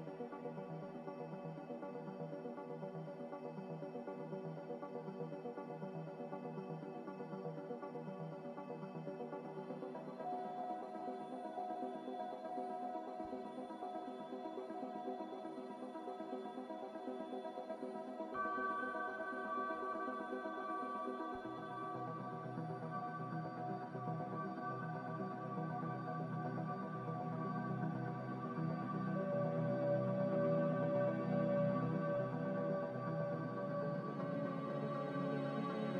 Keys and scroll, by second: 26.4 m, 35.5 ctrl+z.